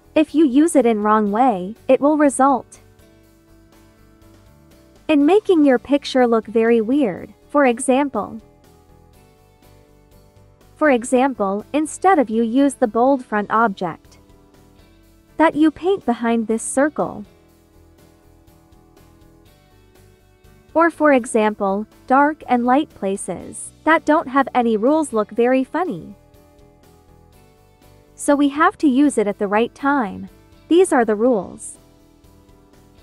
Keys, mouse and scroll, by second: 2.4 click, 7.0-13.0 drag, 13.4 ctrl+z, 13.5 ctrl+click, 13.8 ctrl+z, 14.0 ctrl+click, 15.0 ctrl+z, 15.1 ctrl+click, 15.6 ctrl+z, 15.7-18.2 ctrl+drag, 20.5 ctrl+z, 21.8-26.1 drag, 26.1 ctrl+z, 30.6 click.